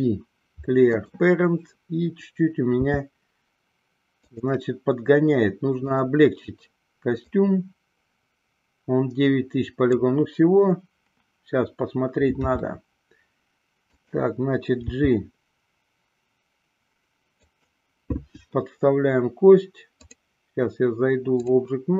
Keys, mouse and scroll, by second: 3.0 s, 4.4 click, 5.9 click, 7.7-10.2 drag, 12.5 r, 14.2 click, 14.8 g, 20.1-21.9 drag.